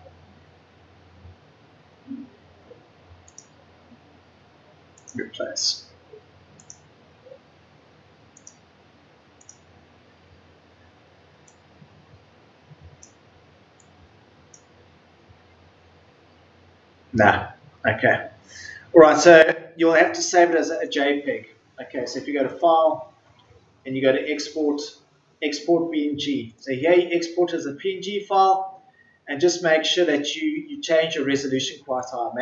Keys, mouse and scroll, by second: 10.0 Delete.